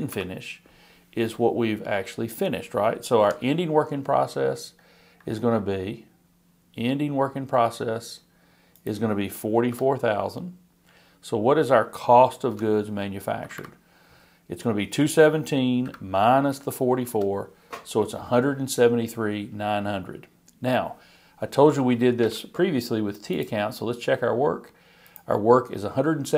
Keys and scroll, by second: 0.1 shift+Right.